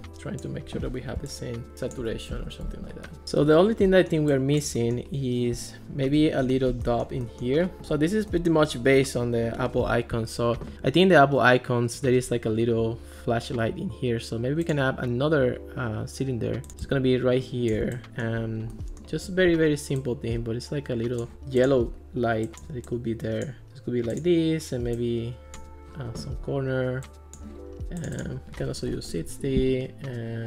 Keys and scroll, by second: 2.4 alt+r, 6.5 alt+r, 28.7-29.5 typing.